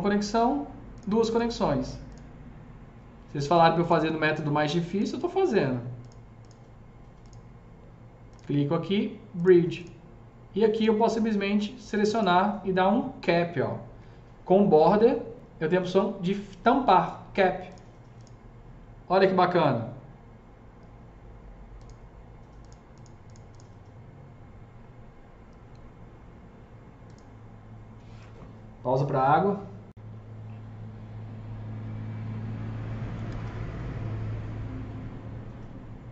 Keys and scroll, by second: 32.9 F3, 33.1 F3, 33.3 F4.